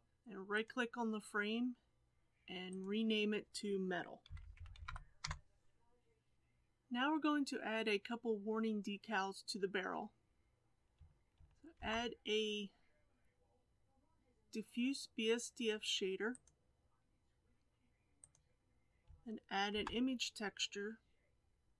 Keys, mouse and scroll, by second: 11.2 click.